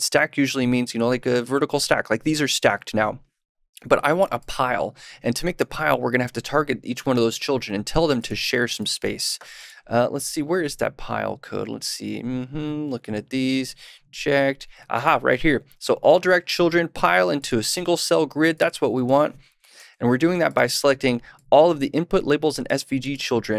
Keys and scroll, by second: 19.7 super+/.